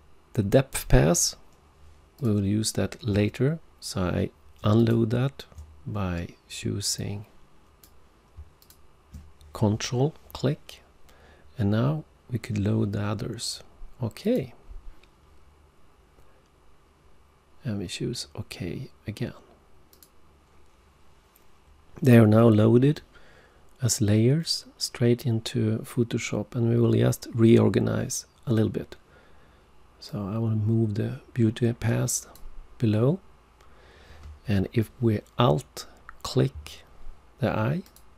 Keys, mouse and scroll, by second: 2.2 ctrl+click, 4.7 shift+click, 7.0 click, 8.6 ctrl+click, 14.2 click, 19.9 click, 30.0 click, 37.8 alt+click.